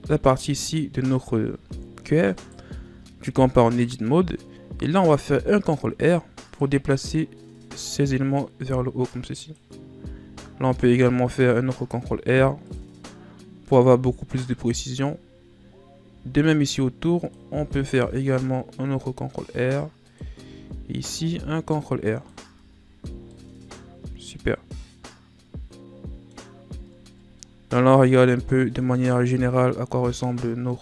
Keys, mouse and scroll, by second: 1.7-2.3 ctrl+scroll up 5, 2.3 right click, 2.8 Tab, 3.4-3.9 scroll up 1, 3.9-5.5 middle drag, 5.5 ctrl+r, 10.2 ctrl+r, 16.0 ctrl+r, 20.5 ctrl+r, 22.4 Tab, 22.8 scroll down 3, 23.0 a, 23.3-26.3 middle drag, 26.5-27.0 scroll down 5, 27.0-27.3 ctrl+scroll up 3, 27.3-29.0 middle drag, 29.0-29.6 scroll up 4, 29.6-30.8 middle drag.